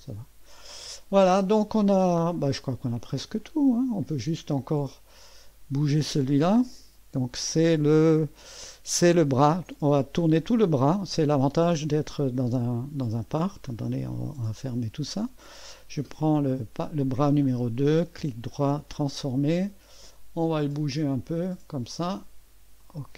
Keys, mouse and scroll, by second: 3.4 click, 4.8 click, 9.6 click, 11.5 click, 14.1-14.9 scroll up 1, 14.9 click, 15.5 click, 18.1 right click, 18.9 click, 19.4 click, 20.4-22.1 drag, 22.8 click.